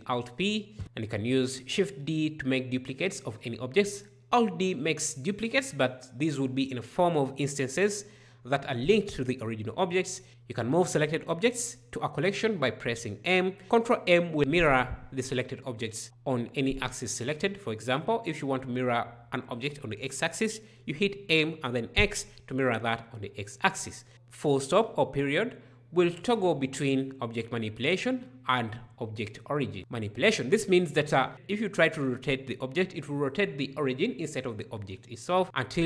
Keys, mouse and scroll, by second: 1.0 shift+d, 4.4 alt+d, 10.3 m, 13.6 ctrl+m, 24.1 ctrl+..